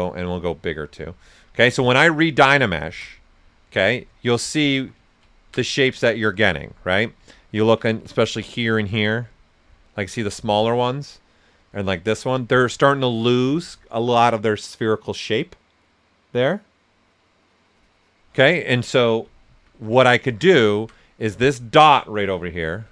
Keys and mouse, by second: 3.8 right click, 5.0-10.5 ctrl+right drag, 19.2 alt+right click, 19.2 typing, 19.4 ctrl+z, 20.1 ctrl+right click, 22.6 shift+m.